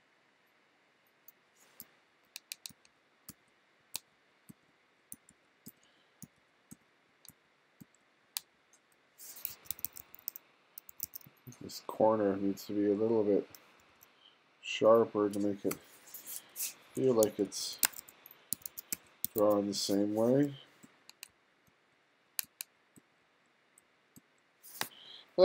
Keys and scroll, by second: 1.8-9.5 typing, 11.0 2, 13.8 2, 15.7 BackSpace, 16.9-24.2 typing.